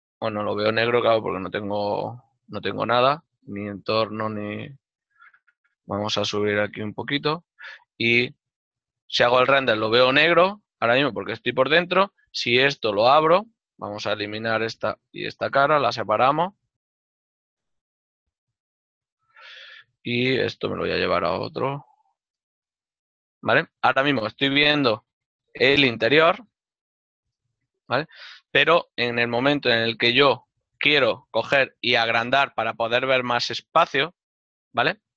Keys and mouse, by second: 9.1 shift+z, 11.0 shift+z, 12.0 right click, 12.3 Tab, 13.7 click, 13.8 right click, 14.5 shift+right click, 15.3 p, 15.9 click, 16.2 Caps_Lock, 17.5 Tab, 18.3 click, 19.0 Caps_Lock, 19.5 right click, 20.3 m, 22.5 typing.